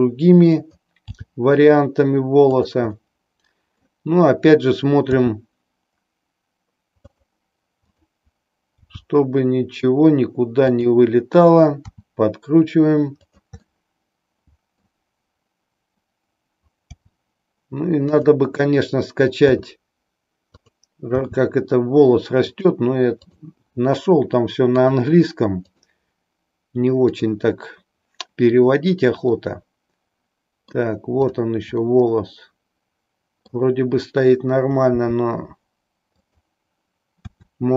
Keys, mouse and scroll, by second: 0.7 click, 1.2 g, 2.7 click, 3.1 middle click, 5.0 r, 7.9 click, 8.9 g, 10.8 click, 11.9 r, 13.7-14.8 middle drag, 16.9 g, 18.3 click, 19.6 s, 21.2 g, 22.6 click, 23.3 click, 24.7 click, 25.8 click, 27.2 click, 29.3-30.8 middle drag, 31.3 click, 31.9-33.8 middle drag, 34.9 g, 36.3 click, 37.3 r.